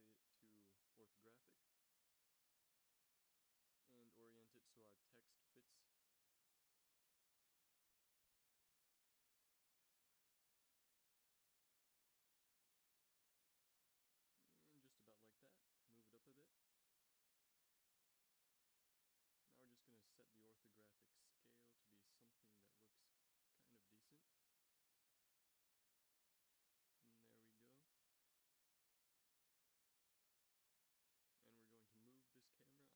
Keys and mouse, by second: 4.5 KP_1, 5.1 z, 5.9 g, 7.0 click, 7.9 KP_5, 9.5 g, 11.4 g, 13.0 z, 13.7 KP_0, 15.3 z, 15.8 z, 22.5-22.9 middle drag, 22.9 g, 26.2 a, 26.6 shift+z, 27.3 middle click, 28.1 z, 28.3 z, 32.4-32.9 drag, 32.7 m.